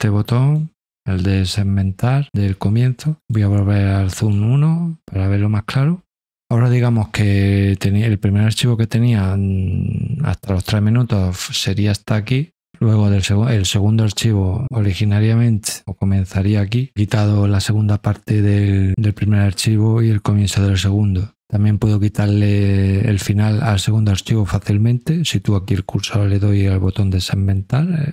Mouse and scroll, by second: 0.2 click, 3.2 click, 4.2 click, 23.5 click, 25.2 click, 26.8 click.